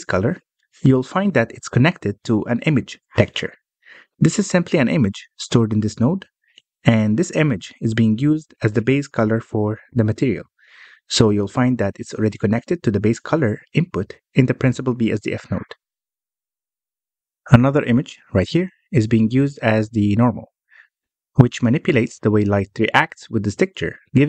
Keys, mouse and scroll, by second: 0.0 middle click, 0.2-1.8 scroll up 7, 1.8 scroll down 2, 2.1 middle click, 3.0 scroll up 1, 3.2 middle click, 3.5 scroll up 1, 3.8-4.5 middle drag, 4.5 click, 6.7 click, 7.8 scroll down 3, 8.1-12.3 middle drag, 12.3-12.7 scroll down 4, 12.7-14.2 middle drag, 14.2-14.7 scroll up 4, 14.7 middle click, 15.0-17.1 scroll up 5, 17.1-17.6 scroll down 7, 17.6-19.9 middle drag, 19.9-20.4 scroll up 1, 20.4-20.9 drag, 20.9-21.9 middle drag, 21.9-22.3 scroll up 2, 22.3-23.1 scroll down 1, 23.1-24.2 middle drag.